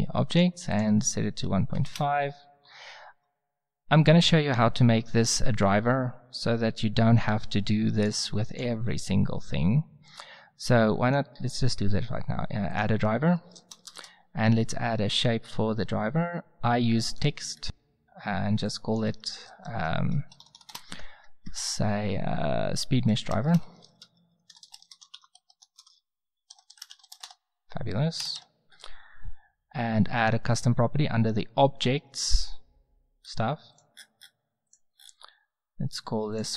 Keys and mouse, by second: 7.9-10.2 drag, 11.0-12.9 middle drag, 13.3 middle click, 13.7 a, 19.2 drag, 19.6 middle click, 19.7 Tab, 20.2 BackSpace, 20.7 BackSpace, 23.3-27.1 typing, 27.2 Return, 28.2 BackSpace, 28.3 Tab, 33.2-33.7 middle drag, 33.7-36.5 drag.